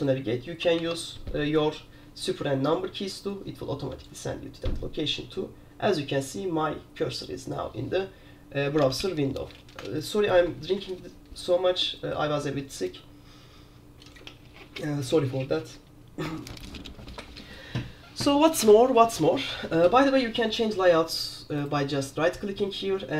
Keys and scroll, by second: 1.0 super+4.